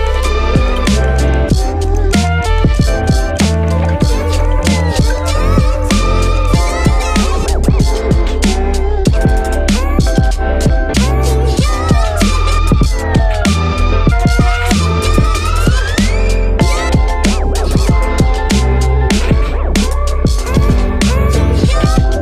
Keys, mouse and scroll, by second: 14.4 space, 16.3 space, 21.3 space.